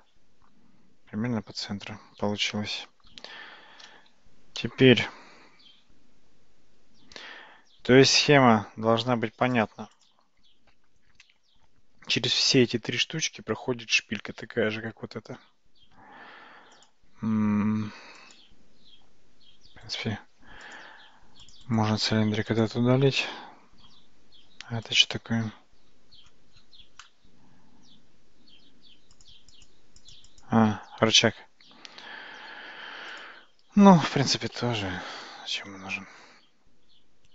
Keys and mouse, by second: 4.2 Tab, 4.6-9.6 middle drag, 15.4 Tab, 18.2 click, 19.9 middle click, 20.1-21.0 right drag, 21.5 click, 21.7-22.7 right drag, 24.9 click, 29.2 click, 29.6 click, 30.0 click, 30.3 click, 33.2 click, 33.9 right click.